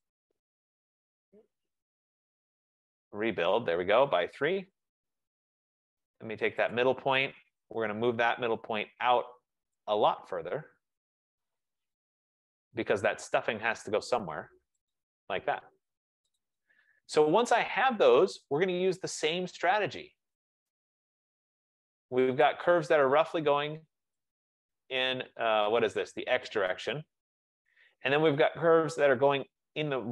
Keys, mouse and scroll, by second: 0.1-3.2 typing, 3.3 Return, 4.6-5.3 typing, 4.9 click, 6.8 click, 7.5-8.2 typing, 9.9 click, 12.9-14.9 drag, 16.5 click, 16.9 click, 17.5 click, 18.0-18.4 middle click, 18.3 middle click, 20.8 right click, 21.3 middle click, 21.6 middle click, 22.6 click, 24.3 click, 26.8 shift+click, 29.1 click.